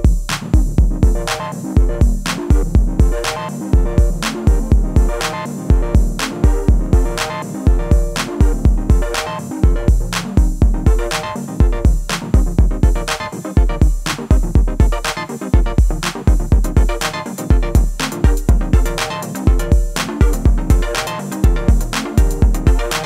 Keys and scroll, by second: 4.4 ctrl+v, 12.8 ctrl+v.